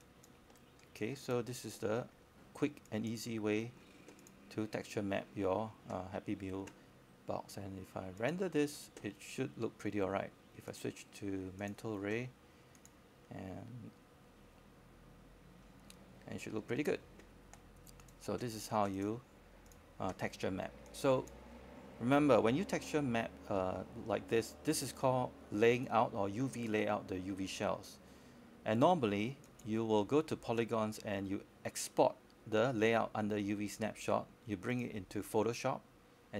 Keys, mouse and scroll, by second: 0.9 alt+click, 2.2 scroll up 1, 2.5 alt+click, 3.0 alt+space, 3.1-4.6 drag, 4.9 alt+middle click, 6.1 click, 9.2-10.2 scroll down 1, 10.3-11.7 drag, 11.7 scroll up 1, 13.9 click, 17.7-22.2 drag, 22.3 alt+click, 22.9 scroll down 1, 23.1 alt+click, 24.0 right click, 25.0 alt+click, 25.6 alt+middle click, 25.9 scroll up 1, 26.8 click, 27.7 alt+middle click, 28.4 alt+click, 29.8-30.4 alt+scroll down 1, 30.4 scroll up 1, 30.7 alt+middle click, 31.4 click, 32.4-35.4 scroll down 1, 35.4 click.